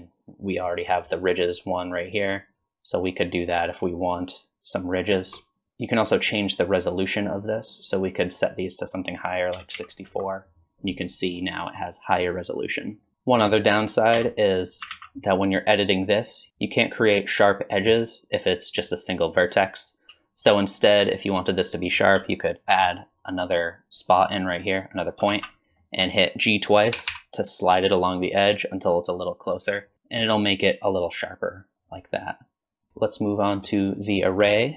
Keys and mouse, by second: 2.6-5.3 shift+drag, 8.0-10.6 drag, 11.1 middle click, 14.1 Tab, 14.9 alt+z, 15.7 click, 22.7 ctrl+r, 25.3 alt+z, 25.8 click, 26.9 g, 32.9 click, 33.5 click, 34.3 shift+drag.